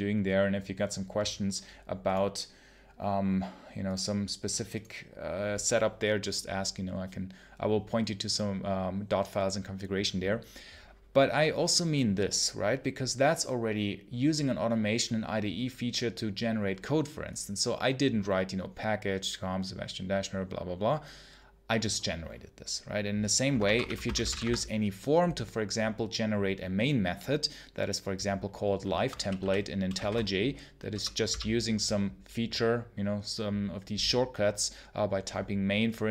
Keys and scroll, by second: 23.3 Return, 23.5-24.6 typing, 28.8 Escape, 29.0-31.1 typing.